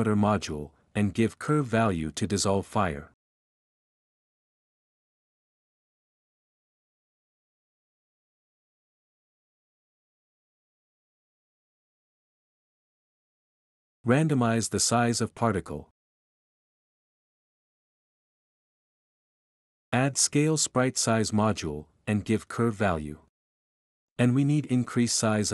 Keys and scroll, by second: 0.0-1.0 typing, 2.5-3.6 typing, 5.2-10.9 typing, 11.9 -, 12.8 1, 12.9 Return, 15.5-21.3 typing, 21.5 Return, 22.6-23.3 typing.